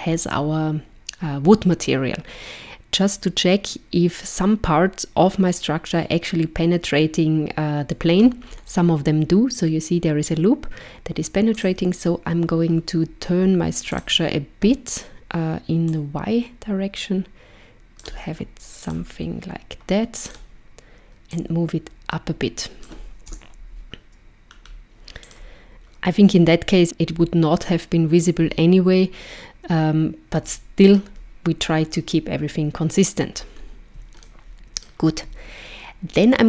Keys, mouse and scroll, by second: 8.4-11.5 scroll up 3, 11.5 click, 13.9 click, 15.9 click, 18.8 click, 20.2 click, 21.3 click, 23.3 KP_0, 24.5-24.9 scroll down 2, 25.2 click, 33.3-33.8 scroll up 2, 34.2 shift+middle click.